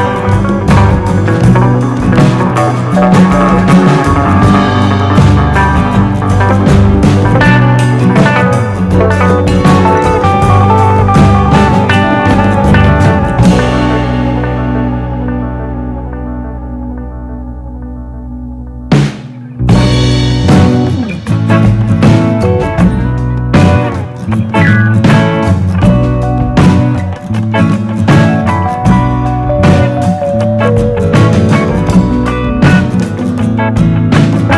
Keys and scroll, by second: 5.5 super+c, 5.7 super+v.